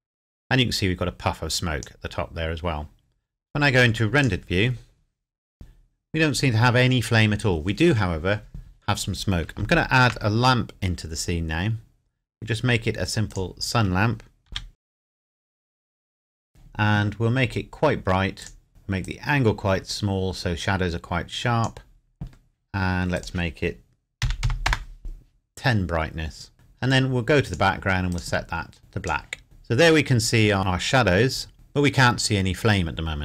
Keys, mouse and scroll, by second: 4.2 click, 9.8 shift+a, 13.3 click, 14.5 g, 15.0 click, 15.5 r, 16.1 click, 18.4 click, 19.0-21.8 drag, 24.2 KP_1, 24.4 KP_0, 24.7 KP_Enter, 27.4 click, 29.4 scroll down 1, 32.2-32.9 scroll down 1.